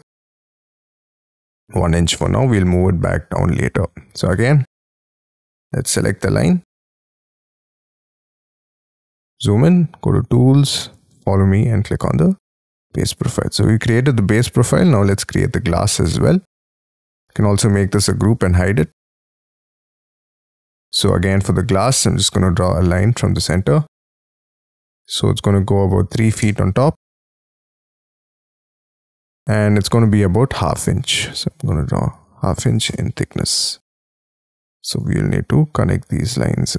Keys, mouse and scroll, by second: 1.5 1, 1.8 shift+', 2.1 Return, 2.7 space, 3.0-4.2 scroll down 21, 4.2 middle click, 4.8 shift+middle click, 5.0-6.5 shift+scroll down 22, 7.1-9.0 scroll up 44, 9.0-10.1 scroll down 7, 13.2 middle click, 13.8 middle click, 15.4-15.9 scroll up 6, 15.9 space, 16.2-16.9 scroll up 1, 17.0 double click, 17.2 double click, 17.4 double click, 18.0 g, 18.3 F2, 18.9 middle click, 19.1-20.0 scroll down 8, 20.3-21.3 scroll up 15, 21.3 scroll down 4, 21.8 l, 23.8 Up, 24.9 3, 26.1 ', 26.3 Return, 27.2-28.1 scroll down 14, 28.1 space, 29.0-29.4 scroll up 6, 29.4 m, 29.8-30.2 scroll up 3, 30.2-30.6 scroll down 3, 31.6-34.5 typing, 32.8 Return, 35.2 double click, 35.4-36.0 scroll down 7, 36.0 Escape, 36.1-36.7 scroll up 7.